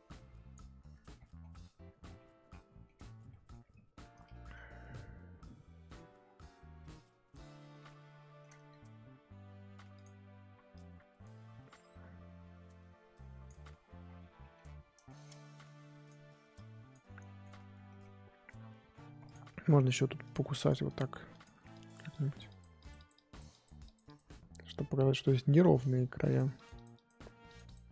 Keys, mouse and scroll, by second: 1.1-2.1 scroll down 17, 2.1 middle click, 2.9-3.3 scroll up 3, 3.3 middle click, 3.7-4.8 scroll up 9, 4.3 shift+middle click, 4.8-6.2 middle drag, 6.2-6.9 scroll down 5, 6.9-7.9 middle drag, 7.9-10.0 scroll up 11, 8.2 shift+middle click, 10.0 click, 10.7-13.7 drag, 13.7-14.4 scroll down 11, 14.4 middle click, 14.6-15.7 scroll up 6, 15.0 shift+middle click, 15.7-17.2 drag, 17.2 shift+middle click, 17.7 scroll down 3, 17.9 middle click, 18.1-19.3 scroll up 2, 19.3 click, 20.2-25.5 drag, 25.5 shift+middle click, 26.3-27.9 drag.